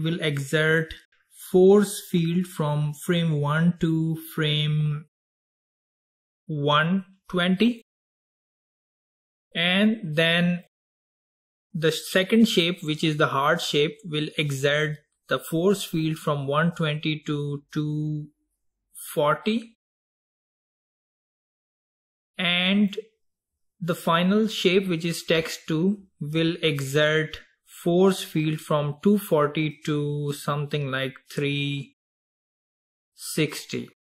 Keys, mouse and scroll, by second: 2.8-5.8 drag, 10.7 click, 16.2-19.2 drag, 22.9 click, 26.9-27.4 scroll down 4, 27.8-29.9 scroll down 3, 29.9-32.9 drag, 33.0-33.9 scroll down 2, 33.9-34.1 drag.